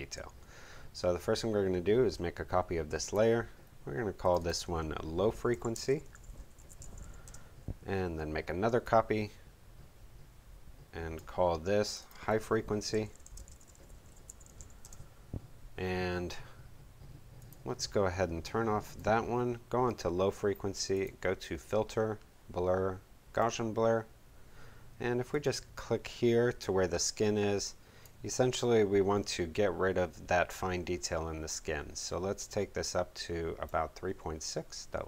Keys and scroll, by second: 5.0-7.5 typing, 12.6-15.0 typing.